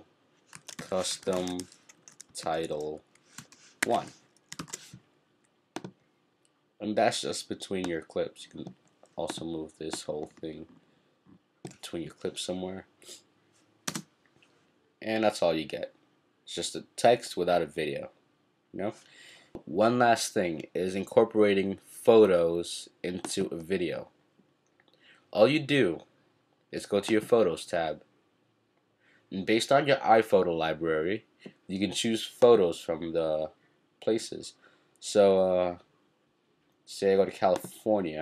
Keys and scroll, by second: 0.3-4.6 typing.